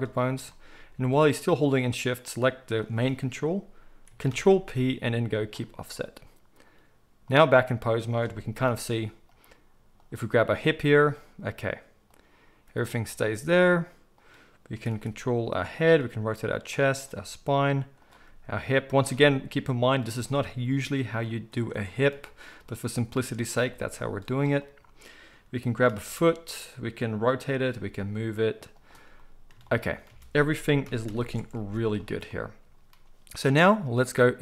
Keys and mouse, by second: 2.2 shift+click, 2.3-6.6 shift+middle drag, 4.3 ctrl+p, 6.6-8.2 drag, 8.2-10.3 middle drag, 8.7 g, 10.6 g, 14.7 r, 15.9 click, 16.0 r, 16.9 click, 17.2 r, 18.0 click, 18.2-24.3 middle drag, 18.2 r, 20.1 r, 24.3 click, 24.4-33.7 middle drag, 25.9 r, 27.6 g, 30.0 a, 30.8 alt+g, 31.0 alt+r, 31.1 alt+s, 31.5 alt+a, 33.7-34.4 drag.